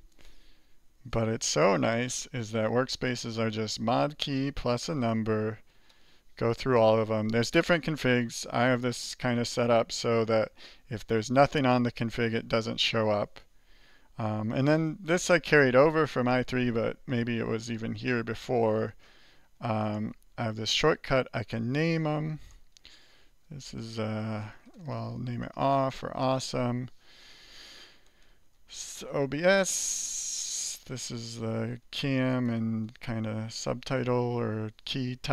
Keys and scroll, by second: 1.1 alt+2, 1.7 alt+3, 2.6 alt+4, 3.1 alt+5, 3.6 alt+6, 4.0 alt+7, 4.3 alt+8, 4.8 alt+9, 5.9 alt+0, 6.6 alt+1, 7.5 alt+3, 8.0 alt+4, 9.2 alt+5, 9.5 alt+6, 11.0 alt+4, 11.5 alt+3, 12.2 alt+2, 17.2 alt+n, 19.6-21.7 typing, 20.8 alt+2, 22.5 alt+n, 23.0-26.0 typing, 27.1 alt+7, 28.0 alt+n, 28.2-29.2 typing, 30.0 alt+8, 30.8 alt+n, 31.0-32.3 typing, 33.6 alt+2, 33.9 alt+1.